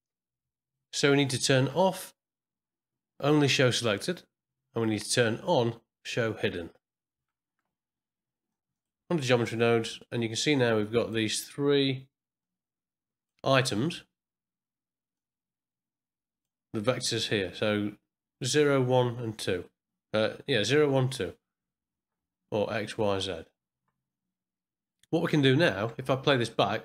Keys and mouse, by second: 2.7-3.4 drag, 3.6 middle click, 3.7 n, 5.9 click, 8.7 click, 10.8 click, 12.5 click, 15.1-16.4 drag, 26.0 space.